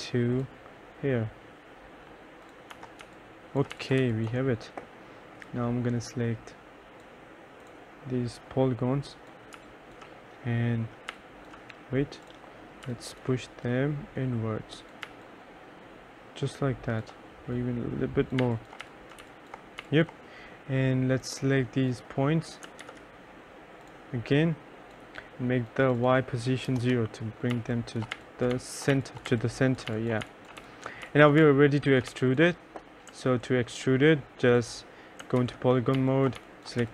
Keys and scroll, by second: 2.8 F1, 3.1-4.6 typing, 9.7 3, 15.2 3, 18.2-19.9 typing, 22.9 ctrl+z, 26.7-32.2 typing, 26.9 Return, 35.5 ctrl+a, 35.8-36.9 typing.